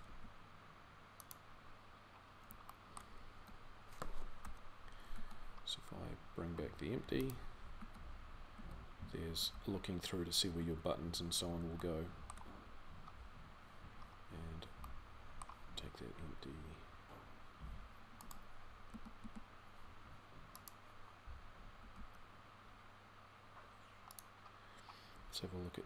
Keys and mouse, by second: 3.1 z, 4.2 KP_3, 4.8 z, 7.6 z, 18.7 a, 19.0 a, 21.6 g.